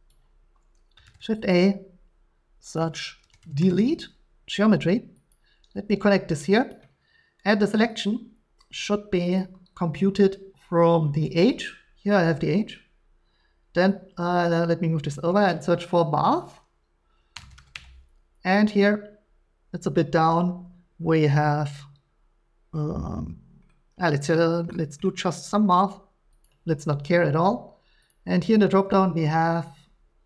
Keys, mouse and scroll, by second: 0.1 click, 1.0 shift+a, 2.7 click, 3.2-3.8 typing, 5.3 click, 6.7 click, 9.4 click, 15.1 click, 17.3-17.7 typing, 26.4 click, 28.1 click, 28.5 click.